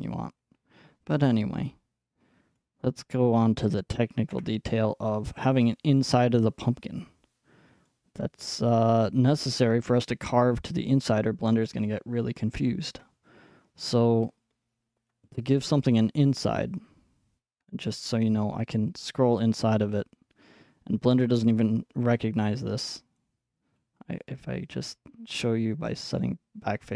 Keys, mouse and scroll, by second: 2.6-3.7 scroll up 1, 3.7-4.3 scroll up 1, 4.3 Tab, 4.3-5.4 scroll up 1, 7.9-9.9 middle drag, 10.1-12.1 middle drag, 15.1-16.9 drag, 16.9 middle click, 17.1-17.9 scroll up 3, 17.9-18.5 scroll up 4, 18.5-22.2 middle drag, 19.7-20.7 scroll, 23.2-26.0 drag, 26.1-26.9 drag.